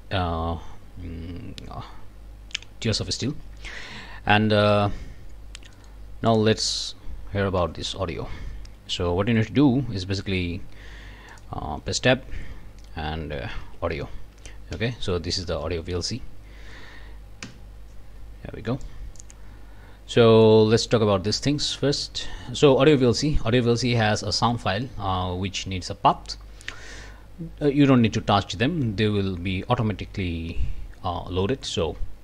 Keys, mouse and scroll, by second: 3.0 scroll down 2, 3.4 scroll up 2, 3.7 click, 5.7 click, 6.3 click, 7.6 Tab, 10.4 Tab, 11.3 click, 11.8 Tab, 13.1-14.1 typing, 14.7 Down, 15.4 Up, 17.5 Return, 18.8 click, 20.0 scroll up 3, 20.1 click, 20.3 click, 20.8 click, 21.3-21.6 scroll up 1.